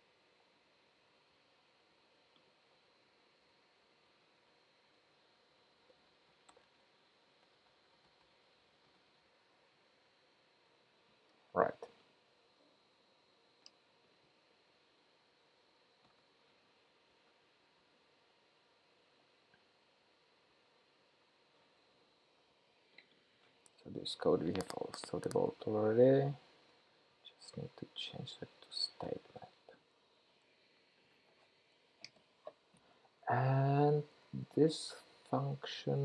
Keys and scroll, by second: 3.6 super+Right, 10.0 shift+super+p, 16.2 ctrl+k, 24.7 super+v, 26.7 ctrl+k.